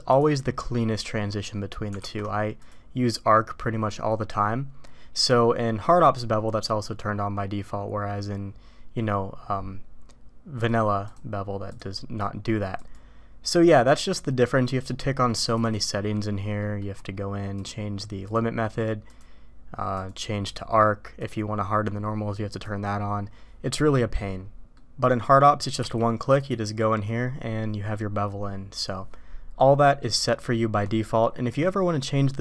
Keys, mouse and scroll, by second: 1.9 alt+v, 10.5 click, 11.1 drag, 11.7-12.8 drag, 15.4 click, 16.6 middle click, 17.6-18.3 drag, 20.0-20.5 drag, 21.2 click, 22.5 click, 24.7 middle click, 25.8 q.